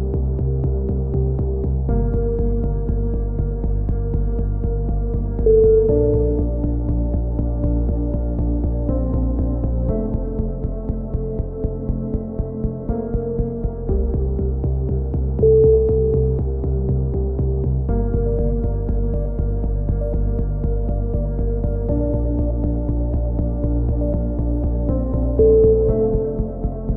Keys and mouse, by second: 1.5-2.1 drag, 1.7 z, 1.9 z, 2.1 b, 8.4 s, 9.7-11.6 drag, 12.1 click, 12.8-13.3 drag, 13.3 a, 13.3 z, 13.6 Tab, 14.3 Tab, 16.9-19.0 drag, 19.0 f, 19.0 a, 19.8-21.6 right drag, 21.4 f, 21.4 a, 22.5-23.3 right drag, 23.3 f, 23.3 a, 24.6-26.1 drag, 26.1 shift+q.